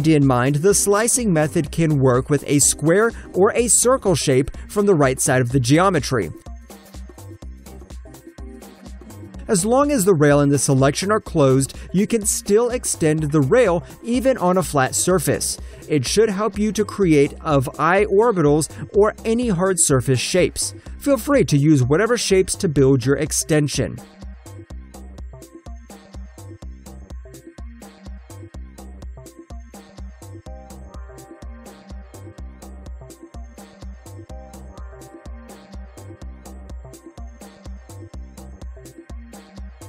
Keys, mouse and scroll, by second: 0.4 shift+middle click, 0.9 alt+click, 1.7 alt+middle click, 2.5 click, 2.8 alt+middle click, 3.1 alt+click, 3.8 shift+click, 5.0 shift+click, 5.9 alt+click, 6.3 Return, 6.7 alt+click, 7.3 shift+middle click, 8.5 alt+click, 8.8 alt+middle click, 9.8 alt+right click, 10.4 click, 12.6 BackSpace, 13.3 click, 15.3 Return, 15.7 alt+click, 16.2 shift+middle click, 17.4 alt+middle click, 17.5 alt+scroll up 1, 18.2 alt+middle click, 19.4 ctrl+shift+click, 21.1 alt+middle click, 22.0 click, 22.4 alt+middle click, 23.1 click, 25.3 ctrl+middle click, 27.3 ctrl+middle click, 28.6 ctrl+middle click, 31.3 shift+middle click, 32.6 alt+click, 33.0 alt+click, 33.2 ctrl+middle click, 33.8 shift+middle click, 34.5 ctrl+middle click, 35.3 alt+right click, 35.4 alt+middle click, 35.5 alt+click, 37.1 shift+Return, 37.5 ctrl+shift+click, 38.1 alt+right click, 38.2 alt+middle click, 38.4 alt+click, 39.0 alt+middle click, 39.4 click.